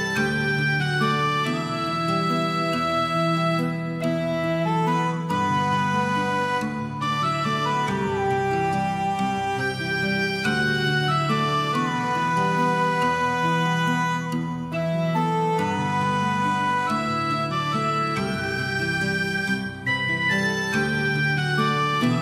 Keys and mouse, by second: 0.3 g, 0.4 g, 0.7 click, 0.9 middle click, 1.5 middle click, 1.8 g, 1.8 middle click, 2.1 click, 2.3 middle click, 3.1 Tab, 3.2 middle click, 3.4 middle click, 3.6 middle click, 3.8 shift+middle click, 4.3 middle click, 4.7 middle click, 5.2 Tab, 5.4 alt+click, 5.5 alt+click, 5.9 alt+middle click, 6.1 shift+middle click, 6.8 shift+middle click, 7.3 shift+middle click, 7.7 Tab, 8.2 middle click, 8.6 middle click, 9.0 middle click, 9.7 shift+middle click, 10.3 Tab, 10.6 shift+middle click, 10.9 alt+z, 11.1 click, 11.4 g, 12.1 right click, 12.3 alt+middle click, 12.7 alt+z, 13.2 middle click, 13.4 shift+middle click, 13.6 alt+z, 14.0 click, 14.2 g, 14.5 click, 14.9 click, 15.5 click, 15.8 g, 16.7 right click, 16.8 g, 18.4 right click, 18.8 g, 19.7 click, 19.9 click, 20.1 alt+middle click, 20.5 alt+z, 20.7 shift+click, 20.9 g, 21.0 g, 21.6 right click, 21.8 g.